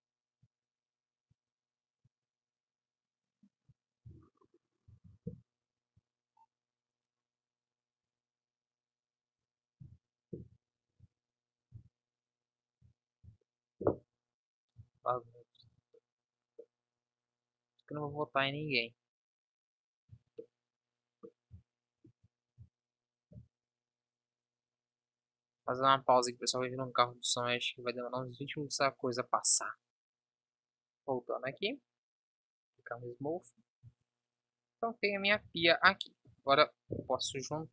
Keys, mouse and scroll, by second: 4.1 Delete, 5.0 Up, 8.1 b, 9.9 Delete, 13.3 Delete, 14.8 z, 15.2 Tab, 15.7 z, 17.0 KP_1, 18.1 z, 20.2 z, 23.4 KP_7, 33.2 KP_1, 33.9 z, 35.5 ctrl+z.